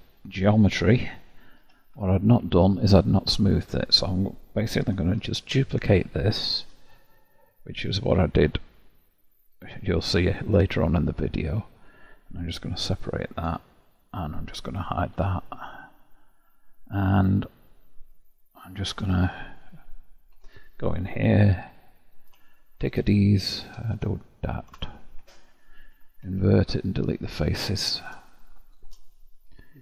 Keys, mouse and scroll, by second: 1.5 3, 2.5-5.1 alt+drag, 5.1 shift+d, 13.5 Tab, 14.1 click, 15.1 h, 16.1 scroll up 1, 16.9-18.8 middle drag, 18.8 Tab, 19.5 click, 20.3 Tab, 21.5 3, 22.0 click, 23.5 ctrl+KP_Add, 23.9 ctrl+KP_Add, 25.8 ctrl+i, 26.6 Delete, 28.3-29.3 shift+middle drag, 29.3 Tab.